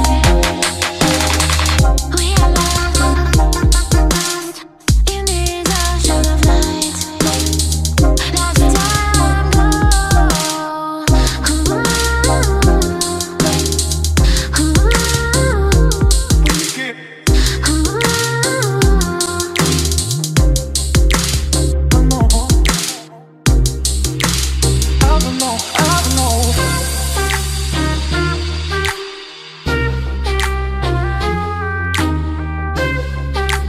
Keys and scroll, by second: 14.2 ctrl+g, 17.0 ctrl+g, 19.4 ctrl+g, 21.7 ctrl+g.